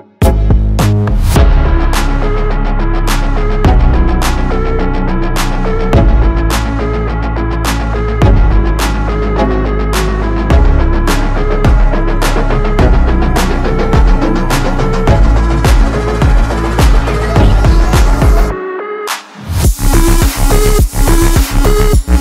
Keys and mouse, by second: 0.8-2.4 typing, 1.0 click, 2.6 click, 4.0 ctrl+a, 6.0 click, 7.2-9.7 drag, 13.0 click, 13.0 click, 14.1 click, 15.9 click, 16.7 ctrl+space, 16.8 ctrl+click, 17.0 ctrl+space, 17.6 click, 17.7 space, 18.0 space.